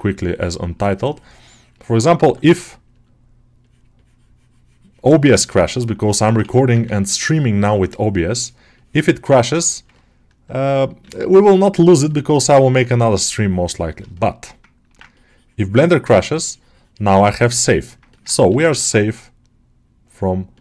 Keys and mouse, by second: 1.8 alt+middle click, 2.1 q, 3.9-5.2 drag, 5.2 shift+click, 6.0 alt+shift+middle click, 6.6 ctrl+click, 8.6 ctrl+click, 9.0 ctrl+click, 9.5 ctrl+alt+middle click, 9.8 alt+middle click, 10.9 g, 12.3 middle click, 12.6 3, 14.0 alt+shift+middle click, 14.3 alt+middle click, 17.1 ctrl+middle click, 17.5 middle click, 18.0 ctrl+alt+middle click, 18.3 g, 18.6 ctrl+middle click.